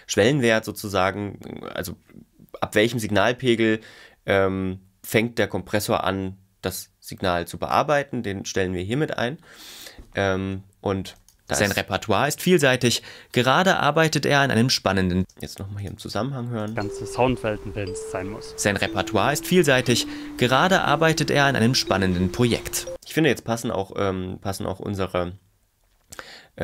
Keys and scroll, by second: 11.3 space, 15.2 space, 16.7 space, 22.9 space.